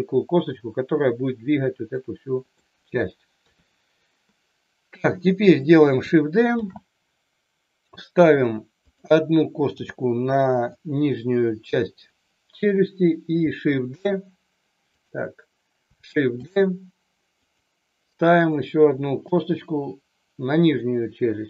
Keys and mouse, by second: 1.8 middle click, 3.4 KP_3, 6.5 shift+d, 8.2 click, 8.7 click, 9.7 g, 10.6 click, 13.9 shift+d, 14.9 click, 16.3 shift+d, 18.5 click, 19.1 shift+d, 19.2 g, 20.6 click.